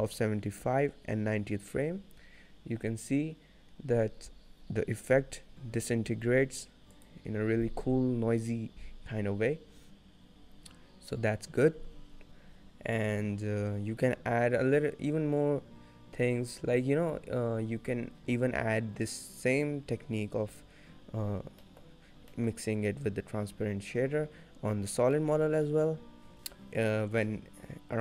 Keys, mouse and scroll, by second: 21.3-24.5 scroll down 5, 21.7 middle click, 22.4 middle click, 25.0 scroll up 4, 25.2 middle click, 25.6-26.0 scroll down 1, 26.0 middle click.